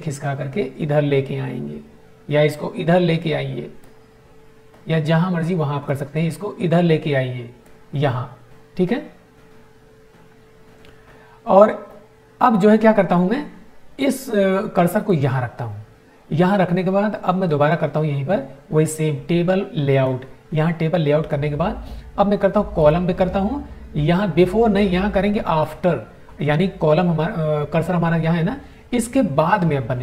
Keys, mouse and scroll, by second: 5.8-7.8 drag, 17.4 right click, 19.7 click, 23.4 click, 25.5 click.